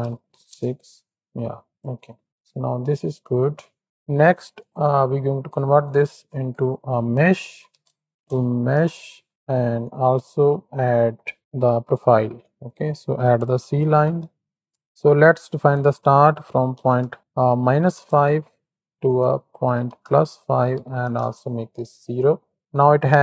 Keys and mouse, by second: 1.9-2.2 drag, 2.7 click, 3.2 shift+middle drag, 3.5 middle click, 4.6 click, 6.3-9.9 drag, 8.1 BackSpace, 10.1 alt+shift+click, 12.6-14.7 drag, 15.9-17.9 drag, 19.0-21.1 drag, 22.1 middle click.